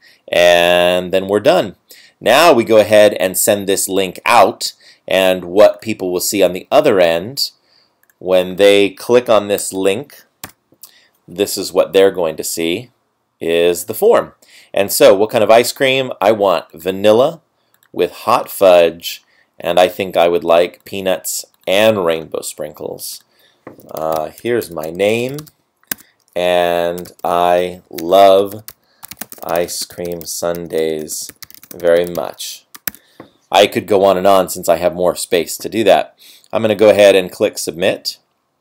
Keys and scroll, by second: 9.8 super+v, 10.5 Return, 24.4 Tab, 26.0 Tab, 27.2-29.7 typing, 31.0 space, 31.6 space.